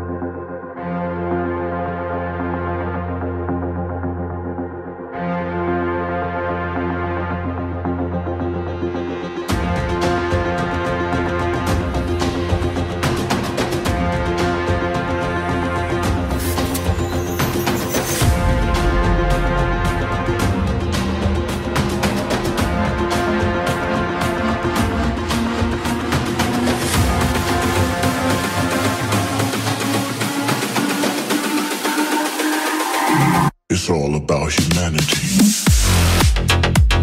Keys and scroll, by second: 4.8 ctrl+d, 8.5 Delete, 11.1 ctrl+d, 13.7 ctrl+t, 27.4 ctrl+t.